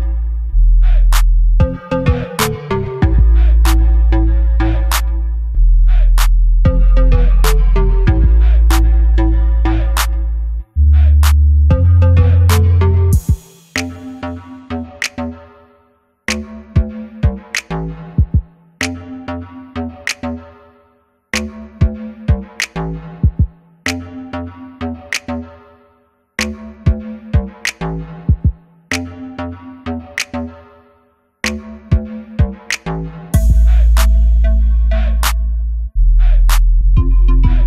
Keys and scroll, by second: 6.4-8.1 typing, 13.1 ], 15.4 [, 15.6 [, 16.1 |, 20.1 b, 21.6 |, 23.2 b, 37.0 e.